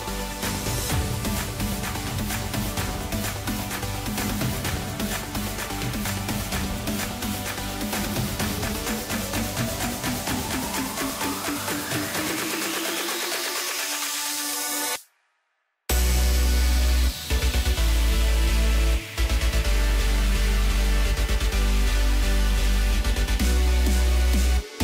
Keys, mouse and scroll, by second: 1.0 click, 1.5-3.1 middle drag, 3.1-3.5 drag, 3.5-5.3 middle drag, 5.3 Tab, 5.7-7.4 middle drag, 7.4 click, 8.4 scroll up 1, 10.1 shift+click, 10.7 shift+click, 11.5 s, 13.3 s, 15.0 s, 16.7 Tab, 17.2-18.5 middle drag, 18.5 KP_7, 19.6 Tab, 21.8 s, 24.3 ctrl+r.